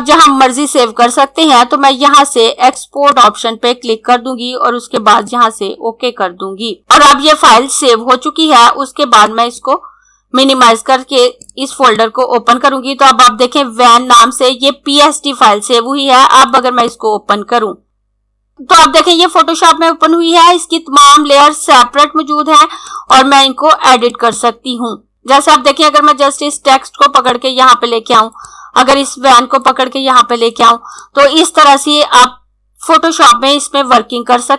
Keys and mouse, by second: 2.4 click, 9.2 click, 15.9 click, 21.4 click, 26.5 click.